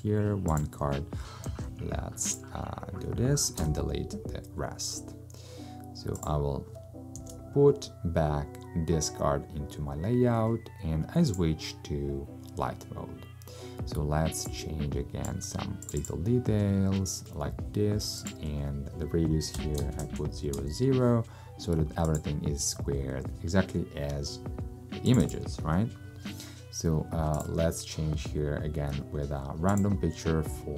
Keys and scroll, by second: 1.5 super+x, 3.7 BackSpace, 7.2 super+v, 19.6 0, 19.9 Tab, 20.0 0, 20.6 Tab.